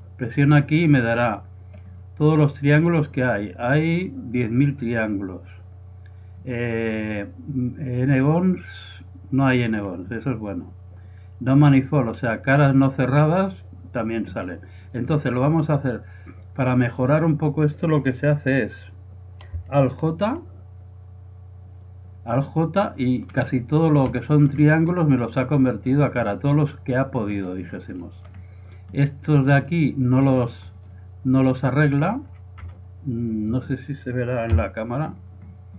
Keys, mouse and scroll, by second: 0.1-2.0 drag, 2.0-14.5 middle drag, 17.2-20.1 middle drag, 22.1 alt+j, 22.8 middle click, 23.3 middle click, 23.4 middle click, 23.6-30.6 middle drag, 30.7-31.7 middle drag, 31.7 right click, 32.2 z, 32.6 z, 34.6 KP_Decimal, 35.2-35.7 middle drag.